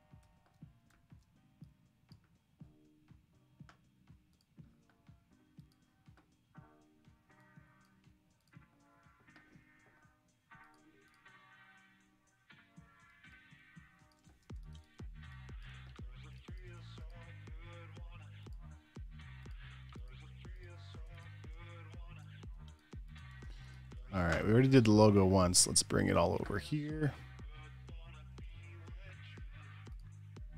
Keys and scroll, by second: 0.5 Escape, 1.2 t, 13.3 space, 14.0 super+space, 14.6-16.5 typing, 17.1 alt+super+v, 21.3 space, 23.6 v, 23.7 space, 24.3 space, 28.7 super+w.